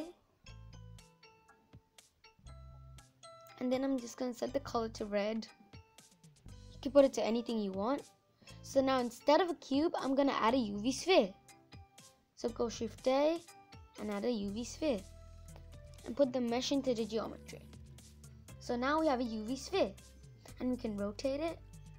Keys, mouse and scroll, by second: 4.7 n, 9.6 Delete, 13.6 shift+a, 16.6 click, 17.3 scroll up 3, 17.7-18.1 scroll down 3, 18.1-19.8 middle drag, 19.8-21.3 drag, 21.3 ctrl+z.